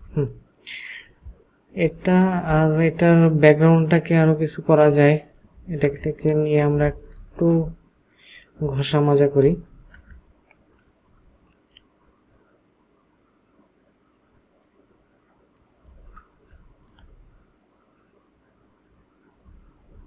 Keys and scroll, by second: 6.8 ctrl+shift+h, 9.4 ctrl+g, 16.5 ctrl+alt+space.